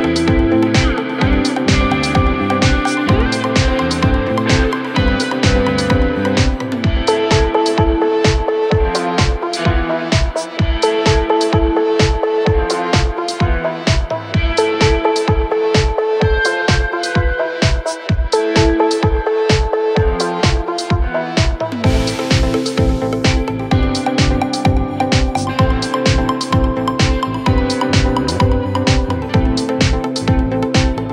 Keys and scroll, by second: 7.5 Escape, 8.5 ctrl+r, 10.0 ctrl+r, 10.6 ctrl+r, 11.0 ctrl+r, 12.0 ctrl+r, 12.8 ctrl+z, 13.9 ctrl+z, 14.6 ctrl+z, 15.0 Escape, 16.0 ctrl+r, 17.1 ctrl+z, 17.4 Escape, 18.3 ctrl+r, 19.4 ctrl+r, 21.0 ctrl+r, 23.0 ctrl+r, 23.5 ctrl+r, 25.4 ctrl+r, 25.7 ctrl+r, 26.2 F3, 26.6 Escape, 29.1 ctrl+r.